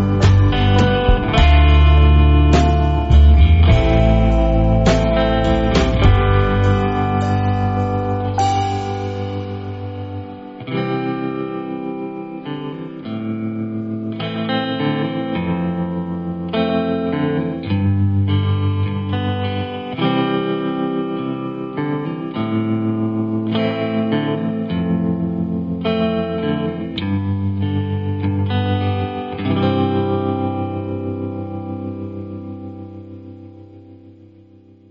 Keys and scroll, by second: 1.4 space, 2.0 space, 2.0 space, 2.8 v, 5.3 o, 8.0 a, 18.0 a, 22.1-22.9 typing, 26.9-29.7 typing, 31.0-31.9 typing.